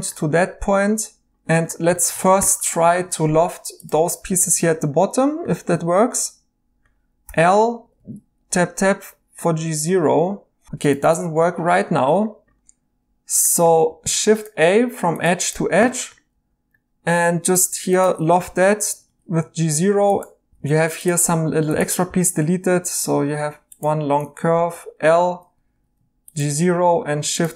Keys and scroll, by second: 0.8 2, 7.2 i, 7.8 Tab, 7.9 Tab, 10.6 Escape, 11.1 Escape, 13.9 a, 16.3 2, 18.4 i, 18.9 Tab, 19.0 Tab, 20.5 ctrl+z, 22.0 x, 24.5 i, 25.5 Tab, 25.7 Tab.